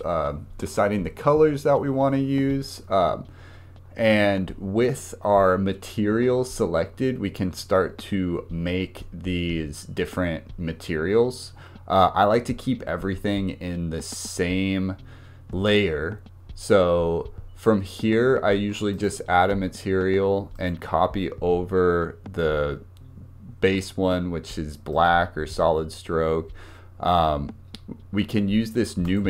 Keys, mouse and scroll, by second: 18.9-24.1 drag, 29.0-29.2 drag.